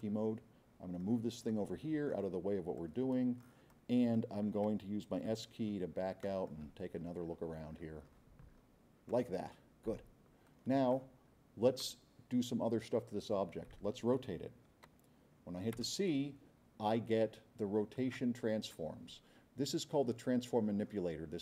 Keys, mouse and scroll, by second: 0.0-1.2 drag, 1.5-2.2 drag, 2.8-3.6 drag, 3.7-4.2 drag, 5.3 s, 5.5 middle click, 5.9 middle click, 6.2-6.6 drag, 6.8-7.3 scroll down 4, 7.7-8.7 scroll down 6, 9.9 scroll up 2, 11.2 middle click, 15.7 c.